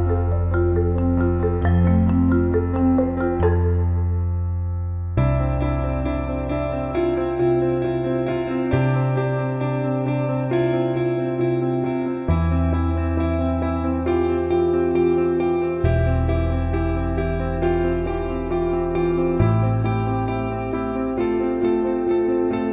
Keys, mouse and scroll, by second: 5.9-10.3 drag, 11.4-15.6 drag, 13.1 BackSpace, 18.1 click, 20.6 click.